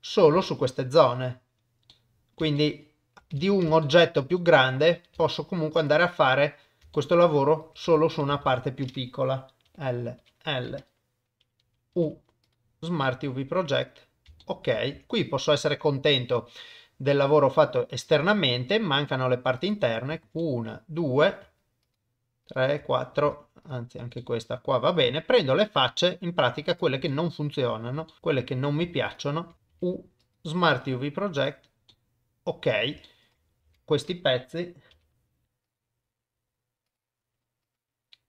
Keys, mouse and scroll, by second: 0.1 click, 0.4 shift+middle click, 1.9 middle click, 2.5 shift+middle click, 3.4 Tab, 3.8 shift+middle click, 4.4 shift+middle click, 6.9 shift+middle click, 7.8 Tab, 8.4 alt+a, 9.7 l, 10.2 l, 11.9 u, 14.4 middle click, 14.9 Tab, 15.1-17.9 middle drag, 18.1 Tab, 18.7 middle click, 19.6 click, 20.4 middle click, 22.5 shift+click, 24.2-25.2 middle drag, 25.6 shift+middle click, 27.1 middle click, 28.1 shift+middle click, 30.3 u, 31.9 middle click, 33.0 shift+middle click, 33.6 Tab, 33.6 alt+a, 34.9 l, 35.4 u, 37.4 Tab.